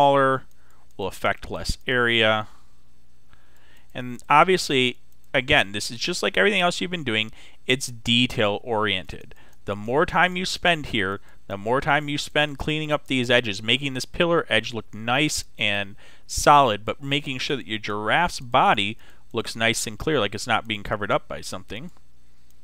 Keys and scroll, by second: 16.0 x.